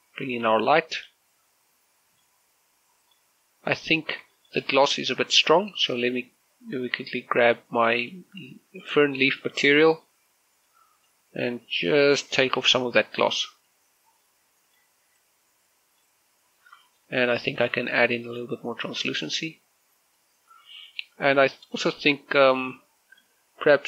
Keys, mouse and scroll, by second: 0.2 middle click, 1.8 shift+click, 2.3 middle click, 3.9 middle click, 4.2 middle click, 4.7 scroll up 1, 5.1 shift+middle click, 6.3 right click, 8.8 click, 11.5 click, 12.7 middle click, 14.4-17.5 drag, 17.5 middle click, 18.4-22.3 drag, 22.3 click, 23.1 scroll down 1, 23.5-23.8 middle drag.